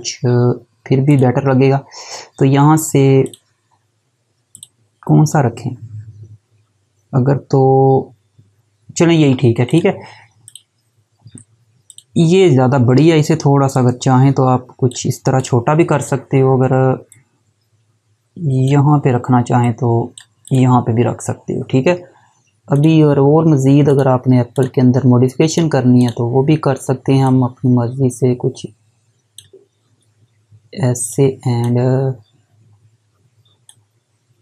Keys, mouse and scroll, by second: 9.7 click.